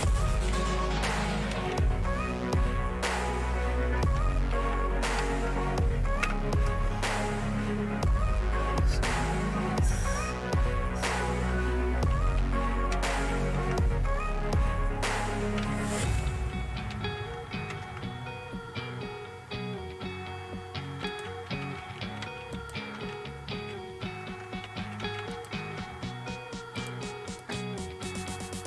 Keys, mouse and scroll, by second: 0.0-2.2 typing, 0.9 scroll up 1, 2.9-3.9 scroll down 1, 3.5-7.5 typing, 4.1 scroll up 1, 9.1 click, 10.3-12.3 scroll down 1, 15.1-17.4 typing, 17.7 Return, 21.1 click, 22.5 click, 24.8-26.1 typing, 25.3 click, 26.8 click.